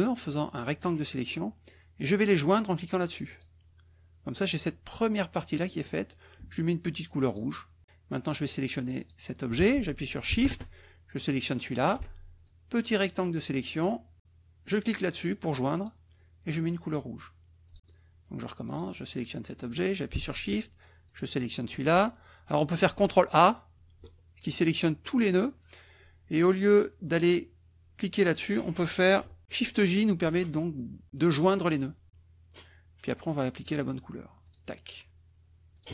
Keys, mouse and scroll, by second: 3.3 click, 7.3 click, 9.0 click, 11.3 shift+click, 12.4-14.0 shift+drag, 15.7 click, 17.6 click, 18.6 click, 21.0 shift+click, 23.7 ctrl+a, 29.7 ctrl+j, 30.8 shift+j, 33.6 click, 34.4 click, 35.7 click.